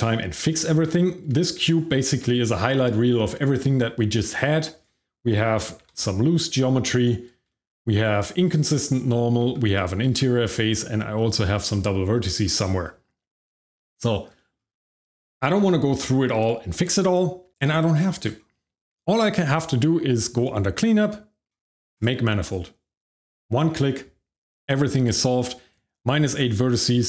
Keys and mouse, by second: 0.6 shift+middle click, 1.3 shift+middle click, 1.7 middle drag, 3.8 Tab, 4.7 click, 5.6 g, 5.8 y, 6.9 right click, 7.5 shift+middle click, 8.7 shift+middle click, 9.4 shift+z, 10.0 shift+z, 10.5 shift+middle click, 12.4 middle click, 13.3 Tab, 13.7 middle click, 14.0 shift+middle click, 14.3 shift+middle click, 14.6 middle drag, 20.3 click, 21.9 click.